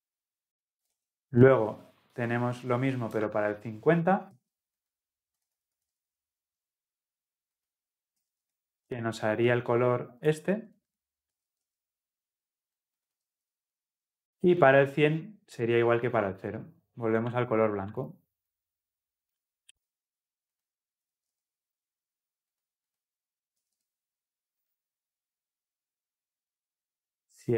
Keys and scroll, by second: 4.3 ctrl+c, 6.2 ctrl+v, 13.4 ctrl+v, 19.7 ctrl+c, 25.3 ctrl+v.